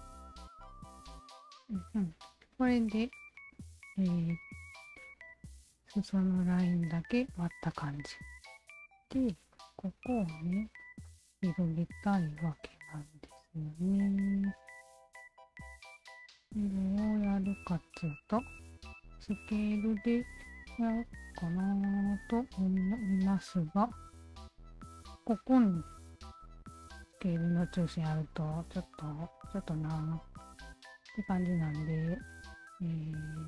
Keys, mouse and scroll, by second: 1.1-8.1 alt+drag, 8.7 click, 9.5 shift+click, 10.4 shift+click, 11.0 shift+click, 11.9 shift+click, 12.4 shift+click, 13.0 shift+click, 13.6 click, 15.0 click, 15.6 click, 16.1 alt+shift+click, 17.2 r, 17.9-24.7 alt+shift+drag, 26.4 shift+click, 32.2 alt+click.